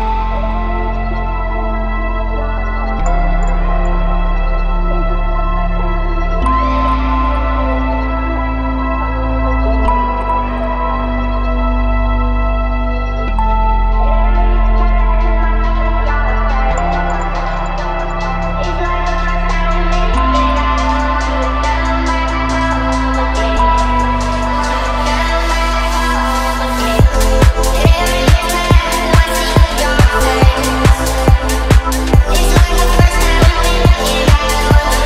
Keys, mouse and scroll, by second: 1.2 g, 1.6 shift+z, 3.7 click, 4.2 g, 6.4 click, 8.8 g, 10.2 right click, 10.2 s, 11.6 x, 13.9 click, 14.4 Tab, 16.0 click, 16.9 e, 17.3 z, 18.2 click, 18.4 Tab, 19.3 ctrl+a, 20.5 Tab, 20.9 click, 22.3 Tab, 23.8 click, 24.2-24.6 scroll up 2, 24.8 shift+middle click, 24.9-25.3 scroll down 2, 25.4 shift+middle click, 25.9 scroll up 1, 27.2 click, 28.1 click, 29.8 click, 31.3-31.6 shift+middle drag, 32.0-32.5 scroll up 1, 34.5 shift+a.